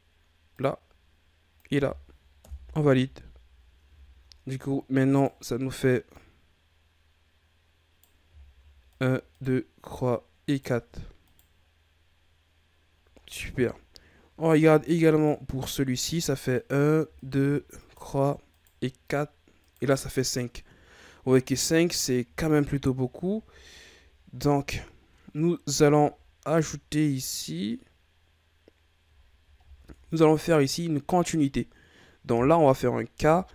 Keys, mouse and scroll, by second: 3.3-4.0 scroll down 1, 4.0 shift+scroll down 1, 4.3-4.8 scroll up 3, 5.1 right click, 6.1 right click, 8.3-8.9 shift+scroll down 5, 8.9 right click, 9.3 right click, 9.8 right click, 10.5 right click, 11.2 right click, 12.8-13.2 scroll down 1, 13.2-13.6 ctrl+scroll up 2, 14.4-15.1 ctrl+scroll up 3, 15.1 right click, 16.5 right click, 17.1 shift+right click, 17.8 right click, 18.5 right click, 19.6 right click, 20.2-20.9 scroll down 4, 20.9-22.0 ctrl+scroll up 1, 22.0-23.6 scroll down 6, 23.6-26.2 scroll up 5, 26.2-27.8 scroll down 1, 28.7-29.2 scroll up 1, 29.2-33.1 ctrl+scroll down 4, 33.2 k.